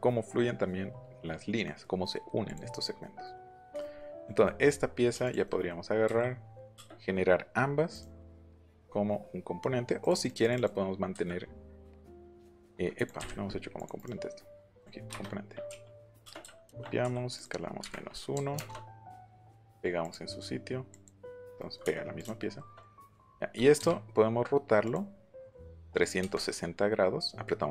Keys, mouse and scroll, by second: 1.6 middle click, 2.4 click, 2.7 middle click, 2.9 middle click, 3.5 middle click, 4.1 click, 4.4 middle click, 5.2 shift+click, 5.4 middle click, 7.9 middle click, 10.0 click, 10.2 click, 11.1 Escape, 11.8 click, 12.2 shift+click, 12.6 click, 12.9 click, 13.1 Delete, 13.7 click, 13.9 right click, 14.7 click, 16.6 ctrl+c, 17.3 click, 17.8 KP_Subtract, 18.3 KP_1, 18.5 KP_Enter, 20.0 click, 20.9 click, 21.5 middle click, 22.1 click, 23.0 q, 23.7 Up, 24.8 click, 25.6 click.